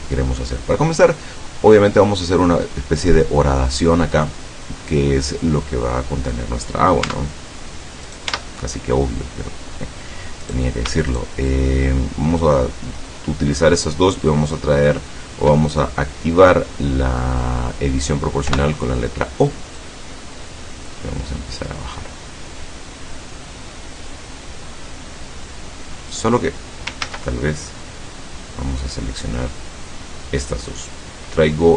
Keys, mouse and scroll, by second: 7.1 Tab, 8.2 right click, 8.4 Tab, 10.5 right click, 11.2 shift+right click, 18.6 o, 19.9-22.1 drag, 22.1-22.5 scroll down 2, 22.8-23.5 scroll down 4, 24.4-24.8 scroll up 2, 27.1 ctrl+z, 27.8-30.2 drag.